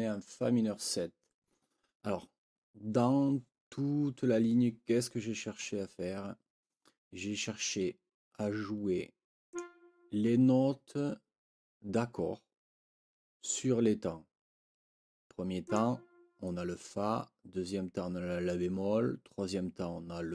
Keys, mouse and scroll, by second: 9.5 click, 15.6 click.